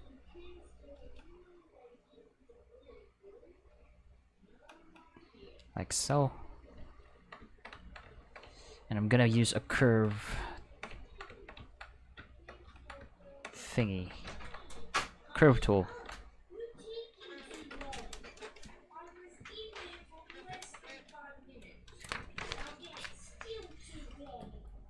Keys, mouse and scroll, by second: 0.0 alt+click, 1.9 alt+click, 2.9 alt+click, 3.8 alt+click, 5.3 alt+click, 6.5 click, 14.4 ctrl+middle click, 14.9 click, 15.9 ctrl+z, 16.5 click, 17.4 ctrl+s, 17.6 ctrl+s, 24.5-24.8 ctrl+middle drag.